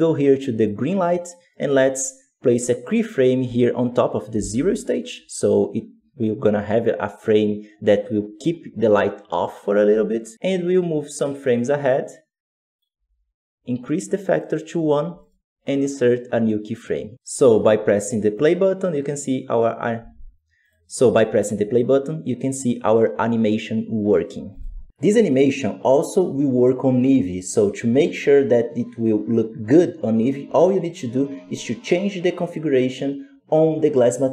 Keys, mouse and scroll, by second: 10.5-15.6 drag, 15.6-17.1 right drag, 17.1-23.5 drag, 24.4-34.3 drag.